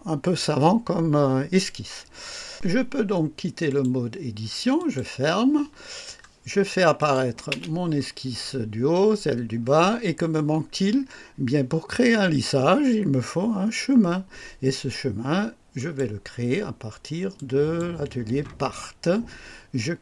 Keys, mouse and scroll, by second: 3.6 click, 4.7 click, 5.8 scroll down 1, 6.9 click, 7.4 space, 9.6 scroll up 1, 15.7 click, 17.3 click.